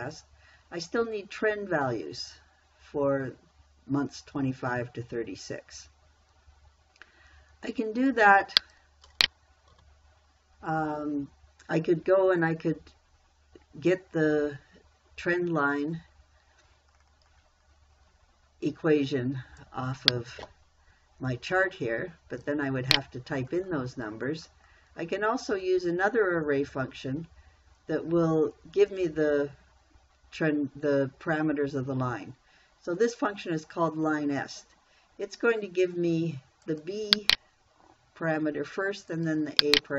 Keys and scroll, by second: 10.2 Delete.